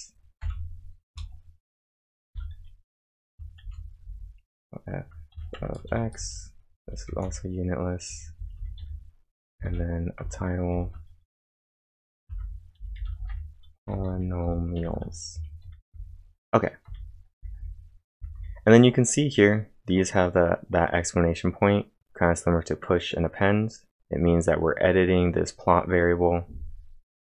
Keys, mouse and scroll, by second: 0.0-0.9 typing, 1.1 Return, 2.3 shift+9, 3.6 shift+', 4.0 f, 5.1-10.7 typing, 10.2 Return, 12.4-15.9 typing.